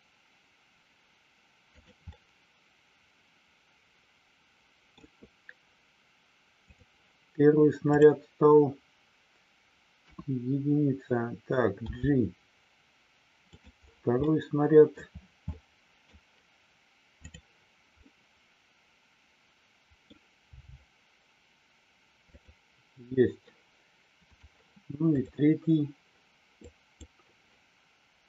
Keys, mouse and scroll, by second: 1.7 click, 2.0-4.9 middle drag, 6.7 click, 7.8 click, 10.0 KP_1, 11.9 g, 14.2 middle click, 15.4 middle click, 17.2 click, 17.9 scroll up 1, 18.0-20.0 middle drag, 22.3 click, 24.2 click, 26.8 click.